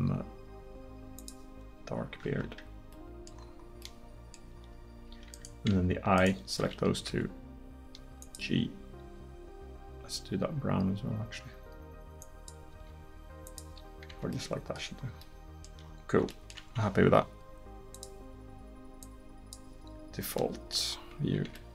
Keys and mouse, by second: 2.3 Tab, 5.1 Tab, 7.1 g, 9.0 g, 12.8 g, 14.1 Tab.